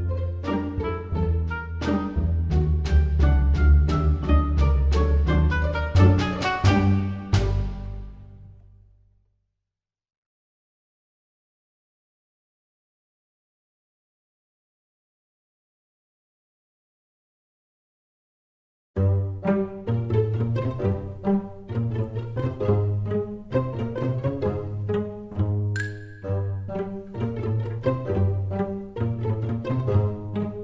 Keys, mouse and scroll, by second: 2.0 e, 4.9 middle click, 5.4 scroll up 2, 6.2 click, 6.5 click, 6.5 click, 9.0 click, 11.7 shift+click, 12.9 shift+click, 15.5 middle click, 17.1 shift+click, 18.7 s, 27.7 middle click, 28.9 click, 30.0 click.